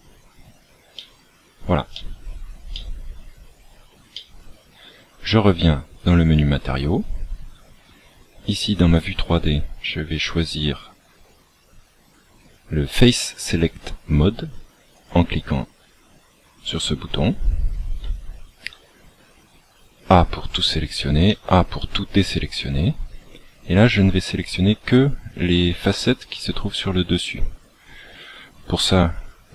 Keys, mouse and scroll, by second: 1.8 middle click, 4.1 middle click, 5.9 click.